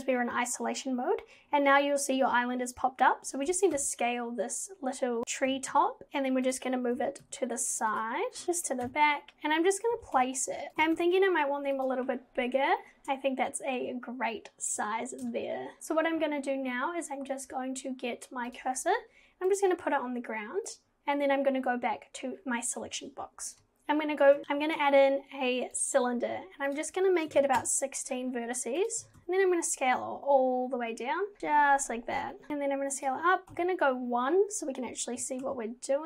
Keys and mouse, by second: 3.5 g, 5.5 g, 7.0 g, 8.4 g, 8.9 KP_7, 10.0 g, 10.7 g, 10.8 g, 18.5 click, 19.5 click, 20.7 click, 24.1 shift+a, 24.4 ctrl+z, 24.7 shift+a, 26.7 click, 28.8 click, 29.1 g, 31.4 g, 32.5 g, 33.5 KP_1, 35.2 g.